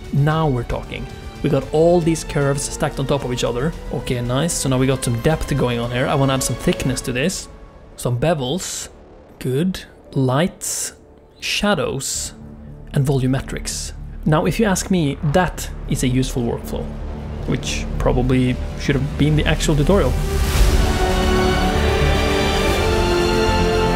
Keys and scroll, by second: 3.3 a, 4.6 alt+a, 6.7 a, 10.3 g, 10.7 alt+shift+z, 11.8 Tab, 11.8 2, 12.1 e, 12.5 Tab, 13.0 0.